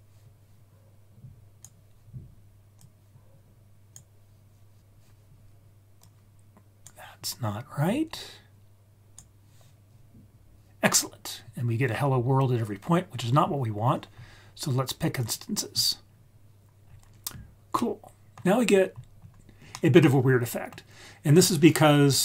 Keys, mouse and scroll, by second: 2.7-4.0 drag, 6.0 drag, 6.1-6.8 drag, 8.1-9.1 drag, 10.2-11.1 scroll down 1, 11.1-12.4 scroll down 2, 12.4-13.1 scroll down 2, 13.1-13.9 scroll up 2, 13.9-15.2 scroll up 3, 15.2 click, 16.0-16.5 scroll down 3, 16.8-17.7 scroll down 3, 17.7-18.3 middle drag, 18.6-20.2 scroll up 6, 19.7-20.7 middle drag.